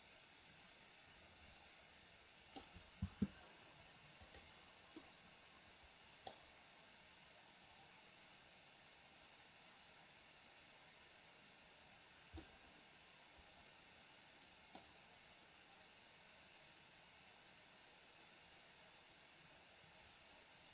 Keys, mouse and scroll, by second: 3.1 space, 5.1-6.5 middle drag, 12.5-15.0 middle drag.